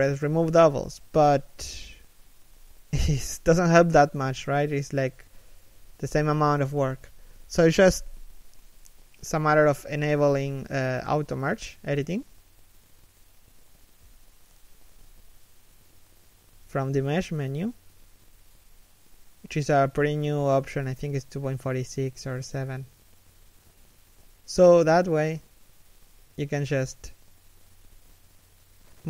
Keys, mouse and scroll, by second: 4.4 middle click, 5.2 a, 6.2 right click, 18.8 right click, 18.9 g, 20.0 g, 21.9 middle click, 22.4 right click, 22.5 g, 23.0 right click, 23.2 g, 23.8 right click, 24.1 g, 25.1 middle click, 25.9 right click, 26.0 g, 26.9 middle click, 27.7 right click, 27.8 g.